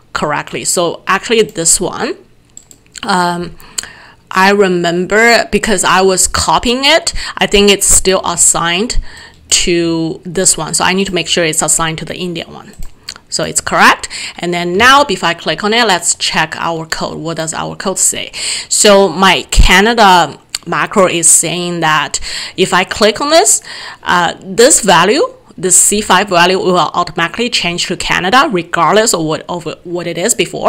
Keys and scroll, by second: 14.8 alt+Tab.